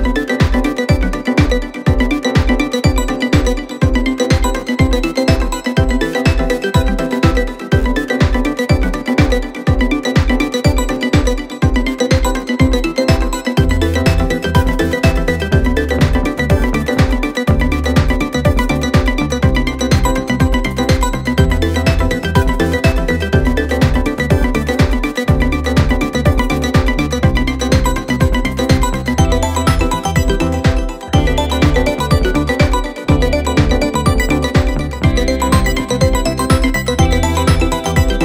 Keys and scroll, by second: 9.2 3, 14.3 ctrl+d, 14.4 Escape, 20.7 ], 26.4 ], 28.7 4, 30.4 3, 31.3 ctrl+d, 31.4 Escape, 32.6 ], 36.0 ].